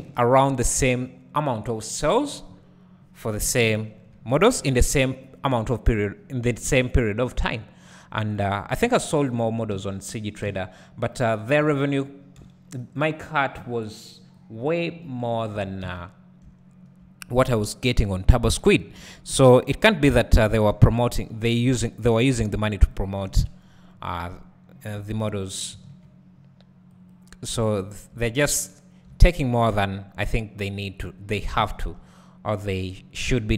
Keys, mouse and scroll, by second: 2.2 click, 2.6-4.1 scroll down 1, 4.1 KP_1, 7.3-9.4 drag, 8.8 z, 11.0 z, 11.5 scroll up 1, 13.1 b, 14.7-23.3 drag, 15.6 Tab, 16.4 `, 17.3 scroll down 2, 17.6 `, 18.7 scroll up 2, 19.0 Tab, 19.4 `, 20.1-20.8 scroll up 2, 20.8 scroll up 1, 21.0 ctrl+r, 23.3 KP_Decimal, 23.9 scroll down 1, 25.7 ctrl+b, 27.6 scroll down 2, 28.2 scroll down 1, 29.7-30.7 scroll up 1, 30.7-31.4 scroll down 1, 31.6 `, 33.3 e.